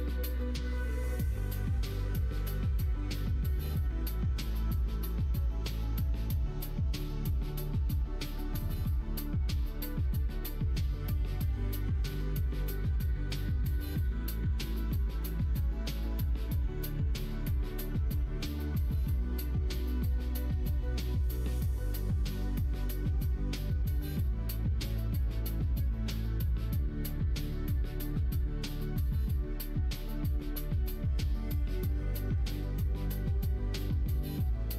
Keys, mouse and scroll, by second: 0.3 alt+z, 0.5-6.2 middle drag, 8.0 ctrl+r, 13.5 middle click, 14.5 3, 14.7 middle click, 15.1 alt+z, 15.8 click, 16.4 shift+click, 16.7 middle click, 17.5 middle click, 18.8 2, 19.3 alt+click, 20.2 g, 22.0-23.1 middle drag, 23.4 3, 23.7 click, 23.9 middle click, 24.8 shift+click, 25.0 middle click, 25.8 click, 26.3 click, 27.1 shift+click, 27.6 x, 28.8 2, 29.1 click, 29.5 shift+click, 30.4 middle click, 31.1 3, 31.4 click, 31.8 x, 33.3 click, 33.9 2, 34.1 click, 34.6 shift+click.